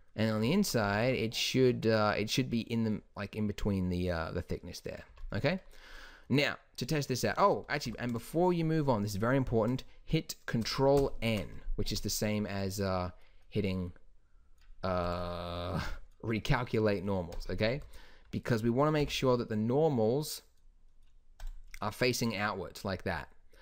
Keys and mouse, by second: 0.3-1.1 middle drag, 1.1 z, 1.8 z, 2.4 middle click, 3.1 middle click, 4.0-4.8 middle drag, 5.3 z, 7.5 Tab, 8.0 a, 8.2 a, 11.1 ctrl+n, 12.0 t, 15.2-17.9 drag, 17.9 t, 19.2 n, 21.5 click, 22.8-23.6 middle drag.